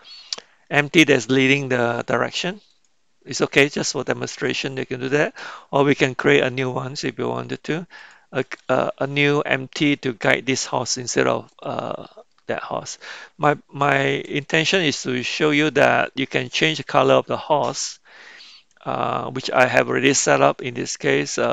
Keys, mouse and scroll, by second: 2.8-3.9 drag, 4.6 click, 8.1-8.9 drag, 9.9-11.5 middle drag, 12.3-13.3 middle drag, 15.9 middle click.